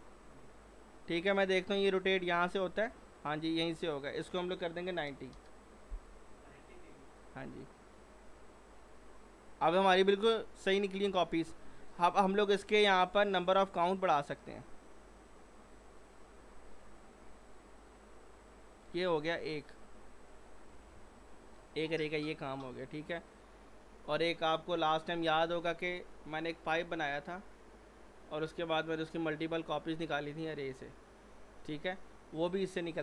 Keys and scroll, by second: 5.0 typing, 5.3 Return.